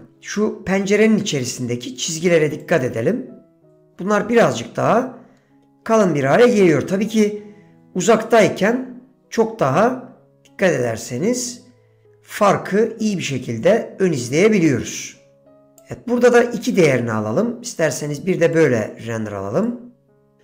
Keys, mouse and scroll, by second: 2.7-3.8 drag, 8.4-15.9 drag, 18.7-20.4 drag.